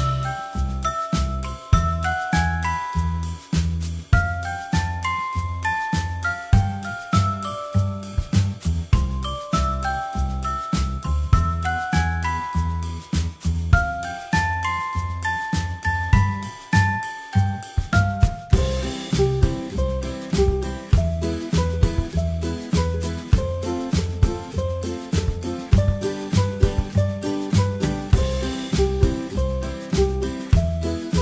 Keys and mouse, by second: 0.1 g, 3.9 middle click, 4.0 a.